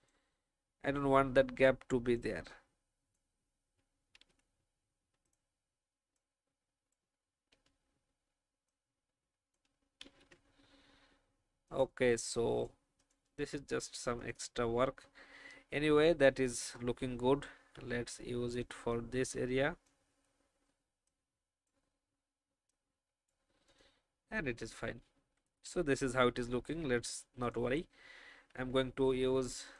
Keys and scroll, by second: 4.2 ctrl+z, 10.1 ctrl+z, 13.9 alt+v, 17.5 alt+a, 24.7 alt+v, 28.3 ctrl+alt+f.